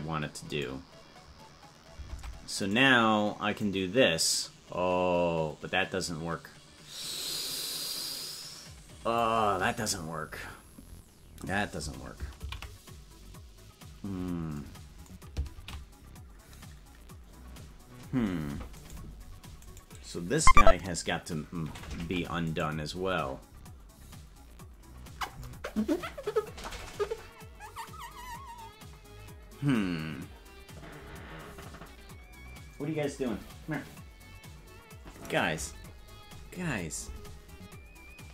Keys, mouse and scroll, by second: 0.6 right click, 2.1 ctrl+Tab, 2.7 right click, 3.6-9.2 drag, 13.3 ctrl+z, 16.5 ctrl+z, 18.8 right click, 22.0 ctrl+Tab, 22.6 right click.